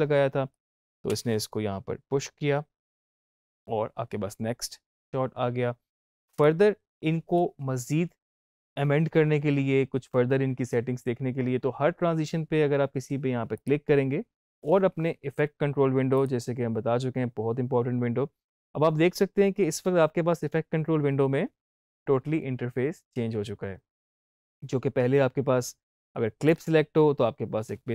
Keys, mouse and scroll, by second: 0.4 click, 1.0 space, 3.3 space, 13.4 click, 16.0 click, 26.3 click, 26.4 click.